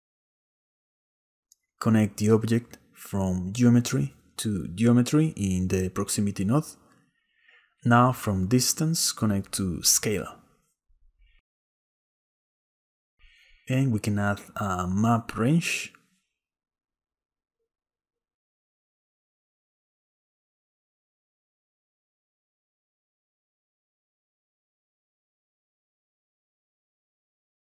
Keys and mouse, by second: 0.1 click, 1.0 click, 2.6-4.1 drag, 4.5 click, 5.7-6.9 middle drag, 6.9 click, 7.0 middle click, 7.1 click, 7.4 x, 8.8-12.0 drag, 12.7 click, 13.4 shift+a, 21.4 click, 21.7 middle click, 24.3-25.7 middle drag.